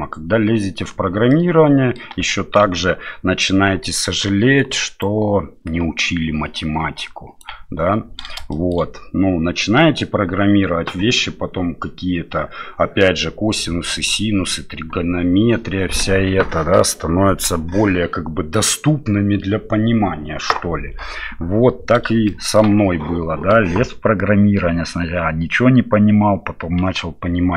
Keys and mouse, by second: 0.9 d, 1.3 middle click, 2.0 d, 2.6 d, 2.6 KP_7, 4.6 d, 5.0-7.4 right drag, 7.4 d, 8.5 shift+middle click, 22.3 shift+middle click.